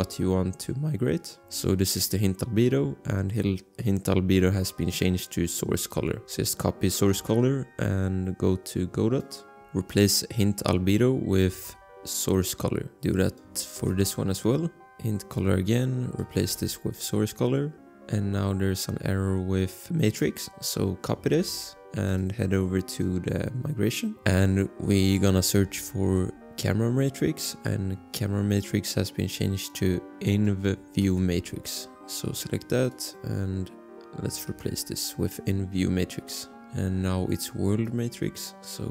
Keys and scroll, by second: 1.4 ctrl+v, 7.3 ctrl+c, 9.4 ctrl+c, 9.6 ctrl+z, 11.7 ctrl+v, 14.0 ctrl+v, 16.6 ctrl+v, 21.5 ctrl+c, 25.8 ctrl+a, 26.2 ctrl+v, 31.2 ctrl+c, 32.9 ctrl+c, 34.7 ctrl+v.